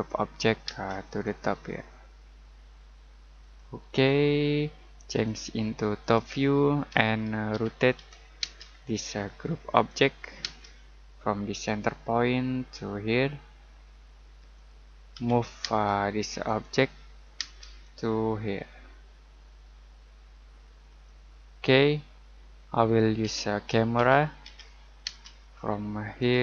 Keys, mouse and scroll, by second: 0.6 space, 1.0 click, 7.5-8.4 typing, 8.6-9.7 scroll down 1, 9.7 click, 10.4 space, 11.6 click, 14.5 click, 15.1 m, 15.6 space, 16.4 click, 17.3 space, 17.8 click, 20.8 click, 23.2-25.0 typing, 26.1 click.